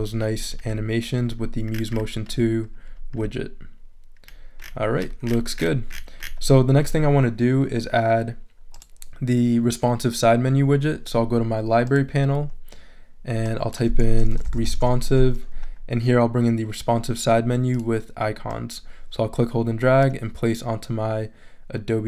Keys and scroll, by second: 14.0-15.2 typing.